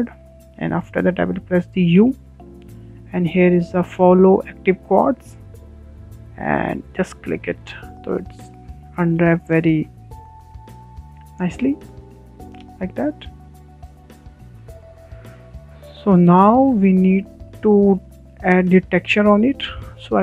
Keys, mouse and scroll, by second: 7.9 a, 8.6 w, 10.0-11.0 drag, 12.8-13.2 scroll down 5, 13.2-14.8 shift+middle drag, 14.8 Tab, 15.2-20.2 shift+middle drag.